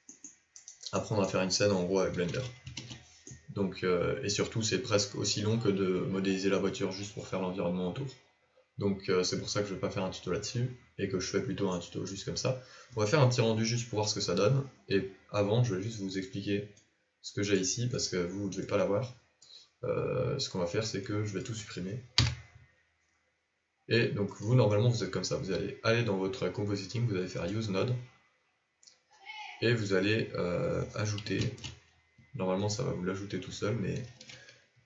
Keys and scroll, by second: 2.6 ctrl+a, 3.1 ctrl+5.